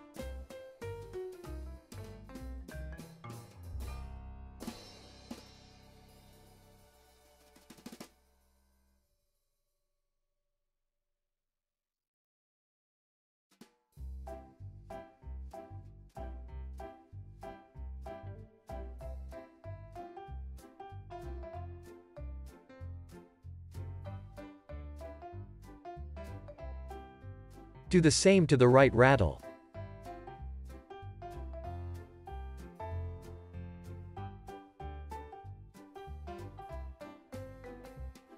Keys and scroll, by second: 5.4 space, 6.6 space, 19.2 space, 24.8 space, 25.1 super+s, 25.5 z, 31.9 z, 34.3 super+c, 36.3 alt+x, 38.2 super+v.